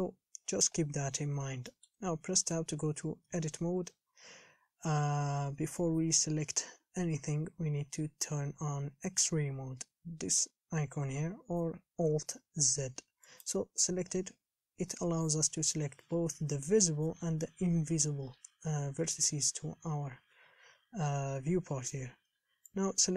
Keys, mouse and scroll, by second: 0.0 shift+space, 0.9-1.5 scroll down 1, 1.5-1.9 scroll up 3, 1.9 shift+middle click, 2.7 Tab, 3.0-3.5 scroll up 1, 3.5 a, 13.7-23.1 drag.